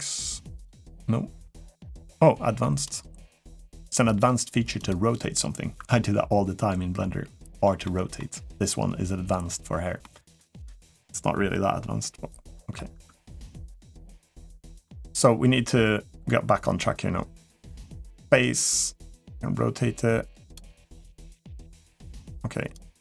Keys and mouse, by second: 0.3 click, 2.5 click, 3.8 click, 4.6 click, 7.6 middle drag, 9.8 middle click, 12.3 middle click, 14.5 middle click, 17.4-20.4 drag, 20.7-22.0 drag, 22.5-23.0 drag.